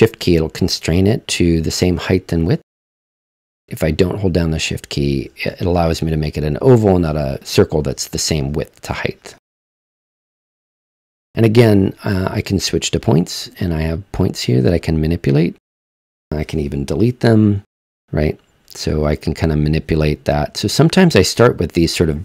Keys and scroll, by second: 17.1 BackSpace, 19.0 BackSpace, 20.8 BackSpace.